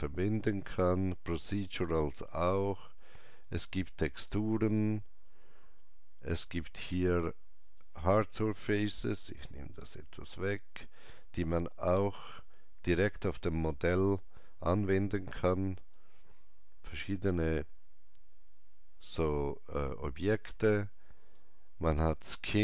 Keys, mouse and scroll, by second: 0.7 click, 3.5 click, 7.6-14.7 drag, 12.3 scroll down 1, 16.3 scroll down 1, 16.4-18.6 drag, 21.2 click, 21.2 scroll down 1.